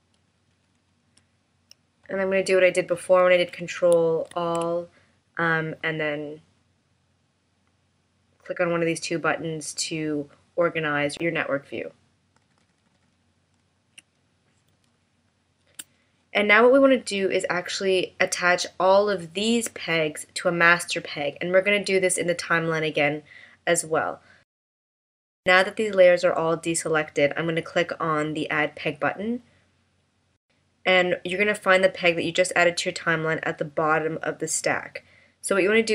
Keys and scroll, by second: 4.3 super+a, 12.4 super+=, 15.0 space.